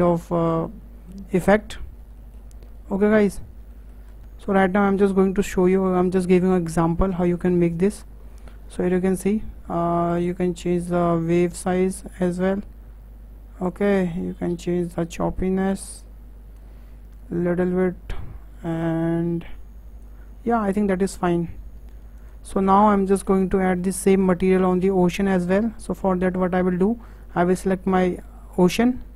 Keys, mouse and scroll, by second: 0.4-1.6 shift+middle drag, 1.6-2.2 scroll up 2, 2.2-4.1 shift+middle drag, 4.1 scroll up 1, 4.2 KP_0, 7.1-13.3 drag, 14.2-17.3 drag, 17.7-20.7 drag, 22.2 click, 23.1 KP_0, 24.3-24.7 scroll down 5, 24.7-25.3 shift+middle drag, 25.3-25.8 scroll up 4, 25.8-28.1 shift+middle drag, 28.1 click.